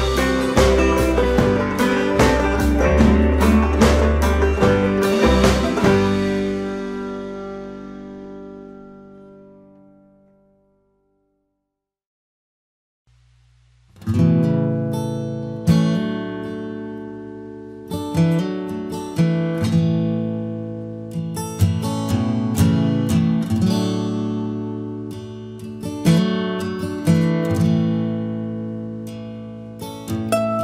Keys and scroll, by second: 8.0 Return, 11.3 ctrl+t, 14.6 Return, 15.2 Left, 17.3 Up.